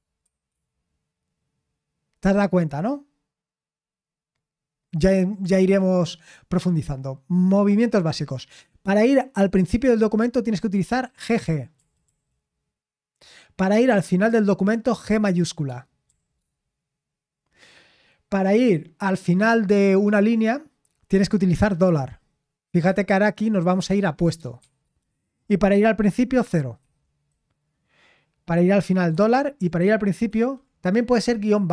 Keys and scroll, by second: 0.0-0.2 typing, 11.8 typing, 16.1 shift+g, 24.6 shift+4, 26.6-27.3 typing, 29.1 typing, 30.3 typing.